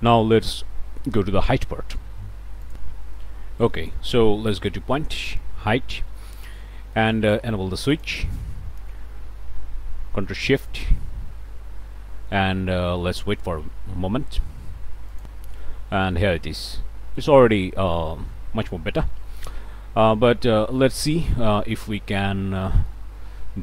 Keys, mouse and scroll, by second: 0.0 scroll down 1, 3.8 click, 4.8 ., 5.4-6.0 scroll up 1, 6.0 click, 6.4 scroll up 1, 6.8 click, 7.9 click, 8.4 middle click, 15.1 click, 16.1 middle click, 16.7-17.0 scroll down 1, 18.2 scroll up 1, 20.3 middle click, 20.5 click, 21.4-21.8 scroll up 1, 22.6 click.